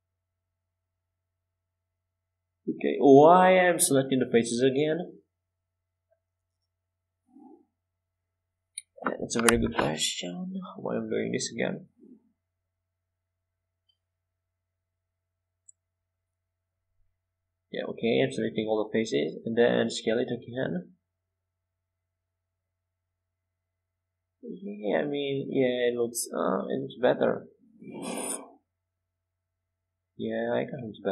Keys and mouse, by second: 0.1 z, 0.8 c, 19.1 s, 22.8 middle click, 26.2-28.1 drag.